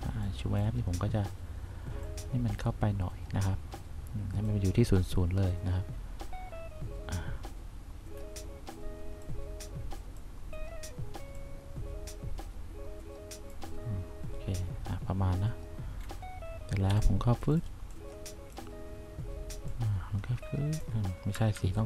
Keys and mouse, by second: 2.2 click, 9.4 click, 17.0 1, 20.5 click, 21.7 ctrl+z.